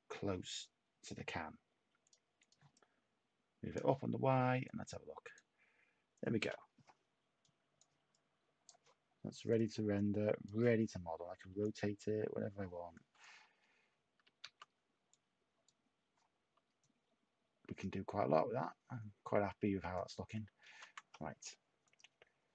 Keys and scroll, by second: 11.5 y, 14.2 ctrl+z.